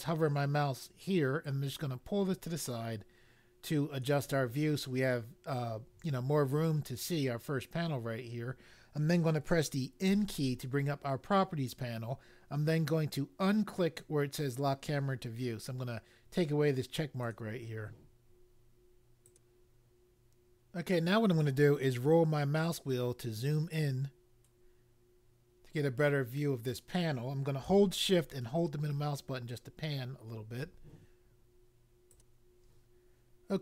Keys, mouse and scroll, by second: 1.4 click, 10.0 n, 17.3 click, 19.2 click, 22.3-22.9 scroll up 1, 22.9-23.5 scroll up 1, 24.3 scroll up 1, 26.3-27.3 scroll up 1, 28.6 shift+middle click, 32.0 click.